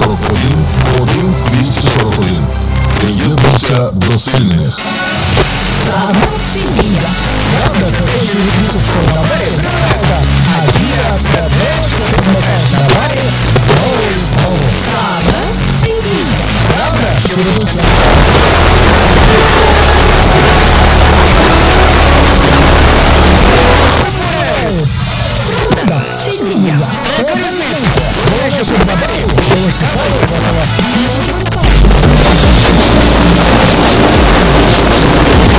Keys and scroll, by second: 23.9 Page_Down.